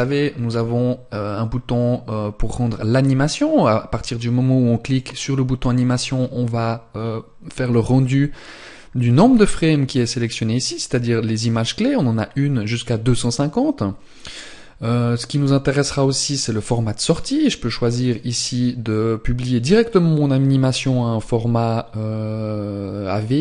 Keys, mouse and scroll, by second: 4.4 click, 14.9 click, 16.6-17.5 scroll down 1, 17.5 click, 17.5 scroll down 1.